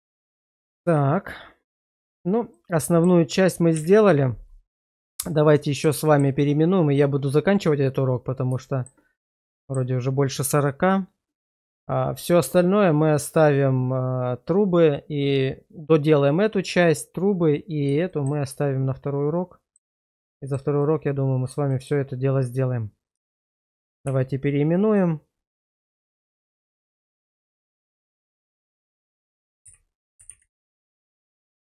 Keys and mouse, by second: 0.5 shift+middle click, 1.7 Tab, 2.5 middle click, 3.7 /, 5.3 middle click, 6.1 shift+middle click, 8.6 shift+middle click, 9.6 shift+middle click, 18.1 shift+middle click, 18.5-19.8 middle drag, 20.3 shift+middle click, 20.8 middle click, 21.7 shift+middle click, 24.1 shift+r, 27.8-28.9 typing.